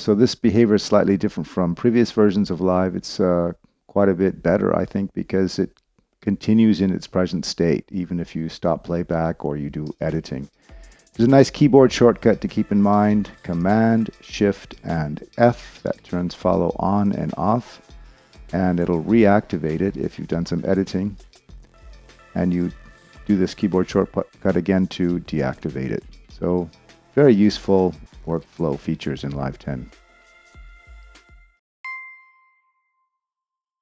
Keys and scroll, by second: 9.9 space, 15.4 shift+super+f, 17.1 shift+super+f, 21.0 shift+super+f, 23.9 shift+super+f.